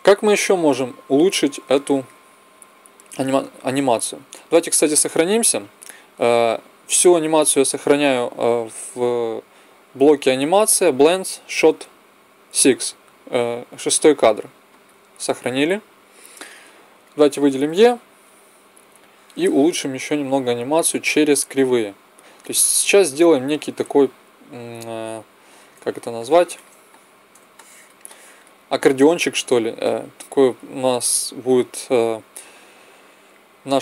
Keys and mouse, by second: 1.5-4.5 drag, 4.5 ctrl+s, 16.8-18.9 drag, 20.6-22.6 drag, 25.3-32.3 middle drag, 33.1 click.